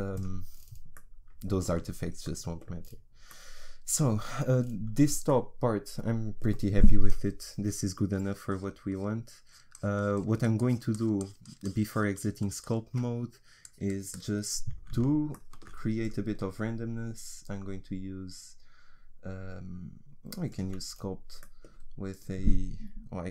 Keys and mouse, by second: 0.5-6.2 middle drag, 6.5 middle click, 8.1-20.9 drag, 20.9 middle click, 22.1-23.3 drag.